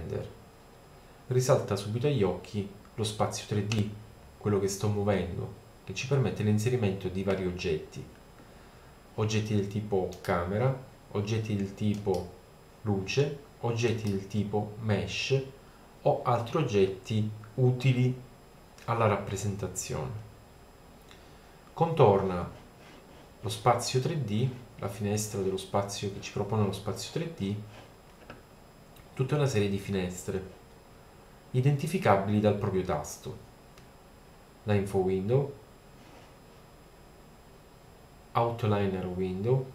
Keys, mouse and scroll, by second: 10.1-13.6 right drag, 13.9 right click, 15.6 click, 19.4 middle click, 34.6-35.9 middle drag.